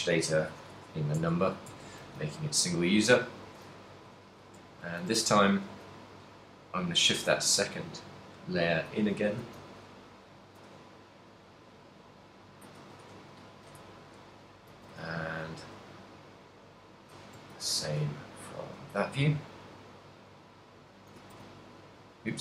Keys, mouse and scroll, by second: 1.1 Tab, 1.4 Tab, 1.8 Tab, 2.3 z, 3.6 l, 4.9 shift+h, 5.3 a, 5.8 b, 7.8 g, 9.1 click, 9.7 a, 10.6 b, 10.8 g, 13.0 click, 13.3 a, 13.8 KP_1, 15.2 b, 16.1 g, 17.5 click, 17.5 a, 17.9 b, 19.0 g, 21.3 click, 21.6 a, 22.1 g.